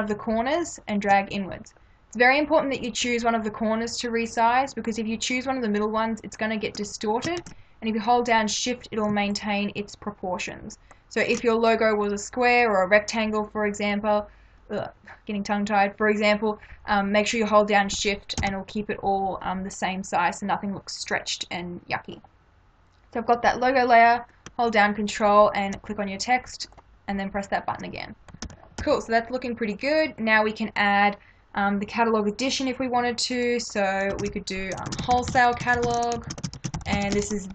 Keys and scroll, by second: 7.4 ctrl+z, 18.4 Return, 28.5 ctrl+-, 34.2 ctrl+a, 34.9-37.3 typing.